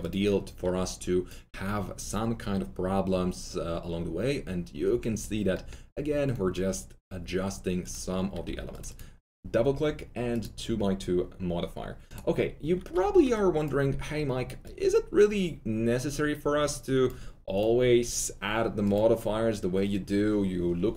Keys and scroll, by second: 8.4 2, 12.9 2.